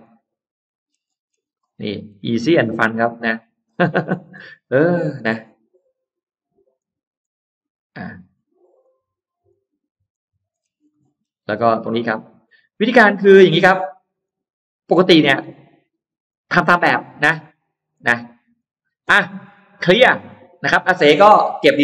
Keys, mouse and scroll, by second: 0.3 click, 0.6-1.9 scroll down 5, 1.4 middle click, 2.2 middle click, 2.4-2.7 scroll down 1, 2.8-3.4 scroll up 1, 3.2 middle click, 5.0 click, 5.9 click, 6.6 click, 7.0 click, 8.0 click, 8.6 click, 9.3 click, 9.9 click, 10.4-10.7 scroll down 2, 10.7 middle click, 11.0-11.3 scroll down 2, 11.5 scroll up 2, 12.3 click, 13.2 click, 14.1 click, 14.8 click, 16.1 click, 17.0 click, 17.8 click, 18.4 click, 18.8-19.6 scroll down 2, 19.6 middle click, 19.8-20.4 scroll up 1, 21.4 middle click.